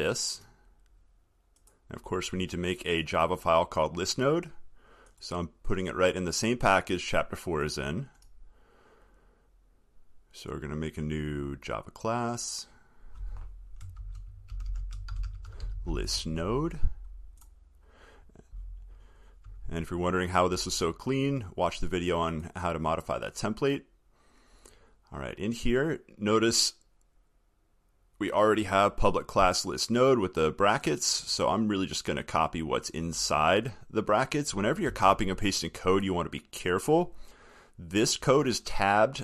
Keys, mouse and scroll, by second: 20.2-20.9 alt+scroll.